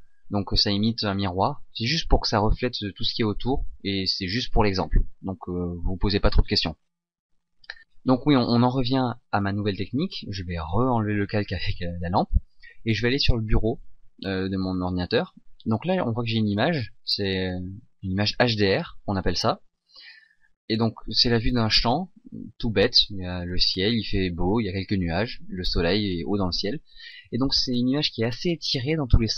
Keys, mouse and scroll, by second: 7.6 click, 8.8 shift+z, 11.6 click.